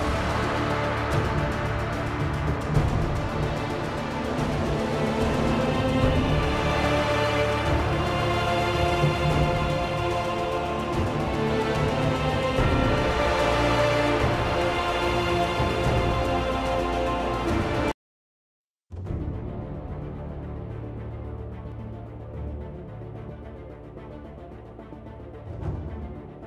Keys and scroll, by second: 1.1 r, 5.9-6.4 typing, 19.6 g, 26.2 r.